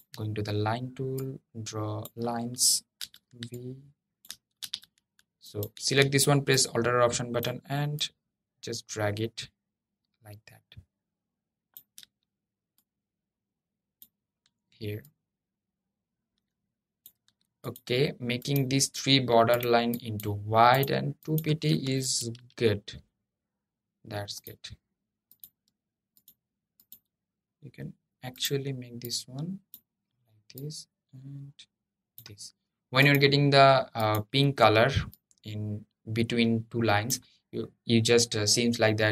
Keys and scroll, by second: 4.3 super+z.